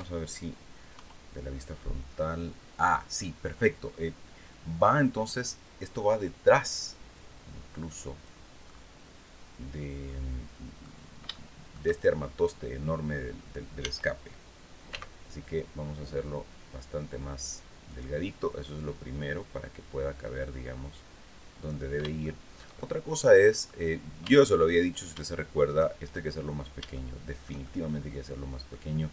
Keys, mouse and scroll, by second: 0.4 KP_1, 6.6-7.9 drag, 8.2-10.5 middle drag, 10.8 shift+middle click, 13.3 s, 14.4 x, 17.4 click, 18.3-21.4 drag, 21.7 shift+middle click, 22.7 middle click, 23.7 Tab, 24.1 click, 25.2 shift+middle click, 25.8-26.2 shift+scroll down 3, 26.4-27.5 shift+middle drag, 27.5 click.